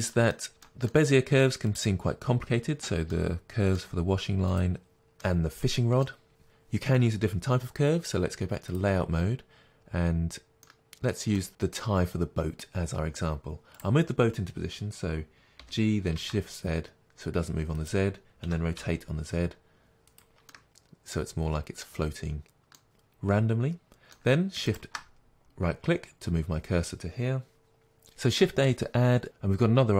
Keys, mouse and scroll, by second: 1.8-3.2 drag, 3.2-4.6 middle drag, 4.6 click, 5.3-8.8 middle drag, 8.8 click, 9.6 scroll down 1, 10.7-13.9 middle drag, 13.7 scroll up 2, 13.9 click, 15.8 g, 18.0 click, 18.6 r, 20.2 click, 20.6-24.8 middle drag, 21.4-21.8 scroll down 2, 23.6 scroll up 2, 27.6-29.9 middle drag.